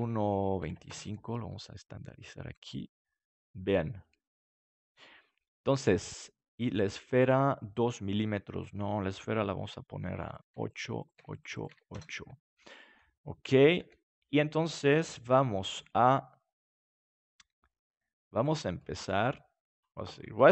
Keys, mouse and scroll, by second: 1.4-3.0 middle drag, 4.7-6.4 middle drag, 6.4-10.3 right drag, 10.3-13.7 drag, 12.4 middle click, 13.7 KP_7, 15.7 g, 18.5-20.5 drag.